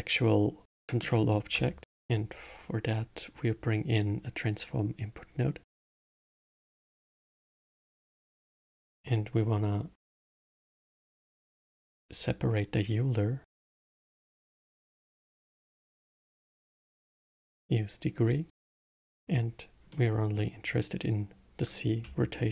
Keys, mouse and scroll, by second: 0.6-1.8 middle drag, 1.8 shift+a, 7.0-8.5 drag, 8.5 shift+a, 15.7 click, 17.6 click, 18.4 click, 19.8-20.7 middle drag, 20.7-22.5 drag.